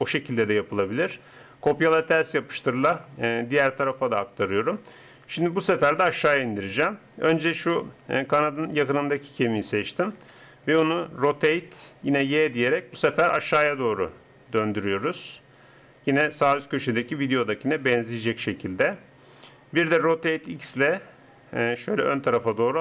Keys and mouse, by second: 8.0 middle click, 10.1 KP_0, 11.3 r, 19.9 r.